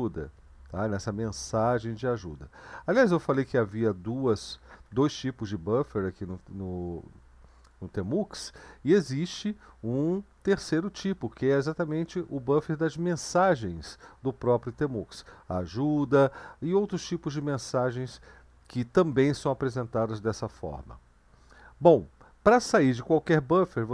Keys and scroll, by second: 3.0 Down, 3.3 Down, 3.5 Down, 3.8 Down, 4.2 Down, 4.4 Down, 4.9 Down, 5.1 Down, 5.5-10.2 Up.